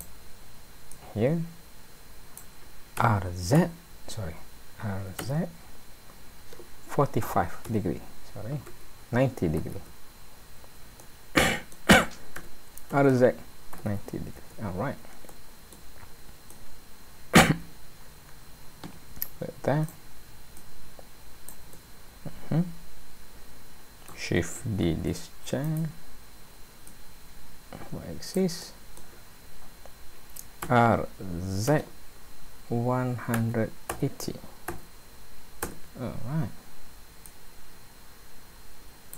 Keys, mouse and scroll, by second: 0.9 click, 3.0 r, 9.6 KP_9, 9.7 KP_0, 11.0 middle click, 12.4 r, 15.3 middle click, 16.5 click, 19.9 click, 20.6 click, 21.7 middle click, 24.9 shift+d, 26.9 click, 28.6 middle click, 30.6 r, 37.3 click.